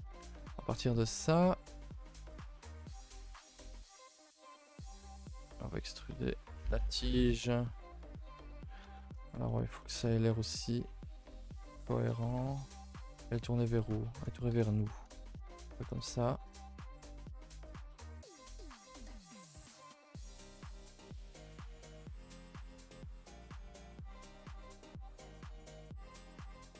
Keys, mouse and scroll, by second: 0.1 shift+middle click, 0.5 shift+middle click, 2.8 KP_0, 8.2 middle click, 8.7 scroll up 5, 9.0 middle click, 9.2 scroll, 9.5 middle click, 10.1-10.4 scroll up 2, 12.8 scroll, 13.1 middle click, 14.6 KP_0.